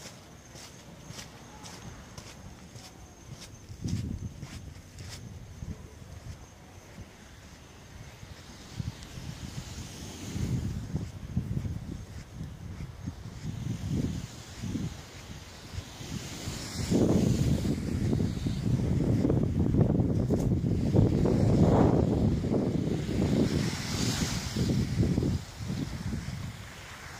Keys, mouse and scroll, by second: 0.1-0.5 scroll up 4, 5.3-5.6 scroll up 3, 5.7-6.8 scroll down 3, 6.8 click, 7.5 middle click, 9.9 KP_7, 11.8 KP_7, 13.2 shift+middle click, 14.2-15.0 scroll up 5, 15.1 shift+middle click, 15.9 shift+scroll up 1, 16.8 r, 19.1 click, 19.8 g, 21.4 click, 21.8 middle click, 25.2 click, 25.7 right click, 26.2 shift+right click, 27.0 m.